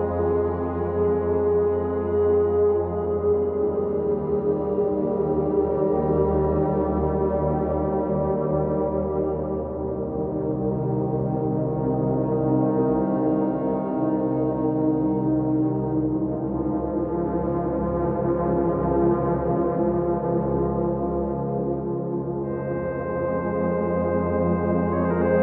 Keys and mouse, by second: 0.8 KP_3, 2.5 2, 2.8 click, 3.7 g, 4.0 z, 7.8 click, 8.3 2, 8.5 click, 9.8 g, 9.9 y, 12.6 click, 14.0 1, 14.4 click, 15.7 2, 16.9 g, 17.0 g, 17.9 click, 18.4 ctrl+KP_Add, 18.5 ctrl+KP_Add, 18.7 ctrl+KP_Add, 19.3 p, 20.5 Tab, 22.3 Tab, 23.1 middle click, 23.6 Tab, 25.1 z.